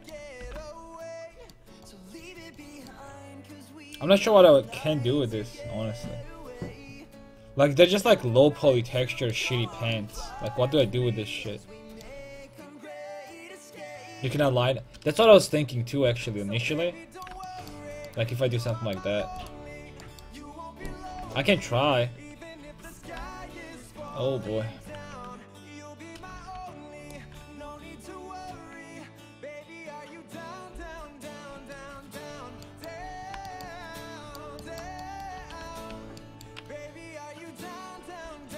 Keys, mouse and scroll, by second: 0.4 g, 4.9-5.9 middle drag, 9.5-10.2 scroll up 1, 10.2 middle click, 19.3 Tab, 20.0 click, 20.1-22.7 right drag, 21.2 Tab, 22.7 shift+j, 23.2 shift+h, 25.1 ctrl+Tab, 27.1 alt+h, 27.1-30.6 drag, 27.4 Tab, 30.7 shift+h, 31.5 Tab, 31.8 middle click, 32.2 middle click, 34.7 middle click, 35.4 a, 35.6 a, 35.9 a, 37.8 a.